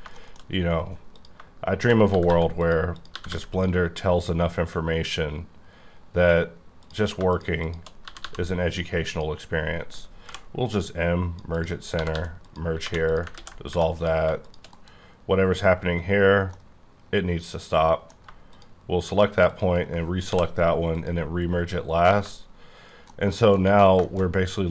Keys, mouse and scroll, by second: 0.1 middle click, 0.5-1.1 scroll up 2, 1.1 click, 2.1 g, 2.3 g, 2.6 click, 2.9 click, 3.1 g, 3.3 g, 3.5 click, 3.9-4.6 scroll down 2, 6.8 click, 7.6 shift+click, 8.0 g, 8.2 g, 9.1 click, 10.2 m, 10.7 click, 11.5 double click, 11.9 g, 12.1 g, 12.4 click, 12.8 2, 13.1 click, 13.3 ctrl+x, 13.7 1, 14.0 click, 14.9 KP_Decimal, 15.2-16.5 scroll down 11, 16.5 middle click, 16.9 scroll down 1, 18.5 shift+click, 19.1 shift+click, 19.5 shift+click, 20.3 m, 20.9 click, 21.4-23.1 scroll down 24, 23.1 middle click, 23.7 scroll up 2, 24.0 shift+middle click, 24.2-24.7 scroll up 4.